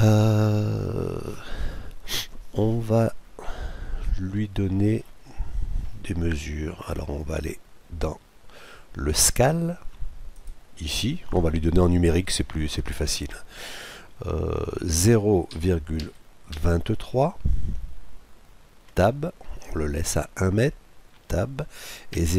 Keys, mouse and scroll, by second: 4.0-5.7 middle drag, 5.9 middle click, 10.3-12.3 drag.